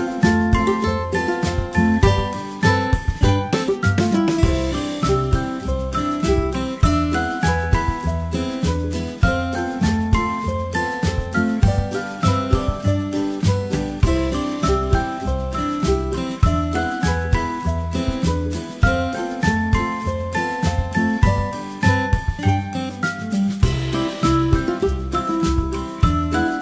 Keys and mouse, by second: 2.6 g, 3.8 g, 5.7 ctrl+z, 15.5 g, 16.5 alt+p, 18.5 g, 20.0 g, 21.2 alt+p, 22.1 g, 23.6 g, 24.2 g, 26.0 Escape.